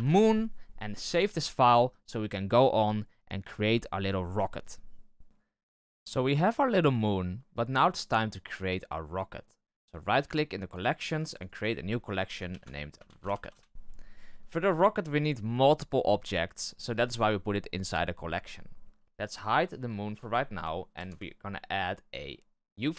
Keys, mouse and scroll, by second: 0.0 o, 5.2-7.9 drag, 9.8-11.2 right drag, 11.2 click, 11.4-19.0 drag, 19.0 scroll up 1, 19.1 right click, 20.1 h, 20.9 shift+a.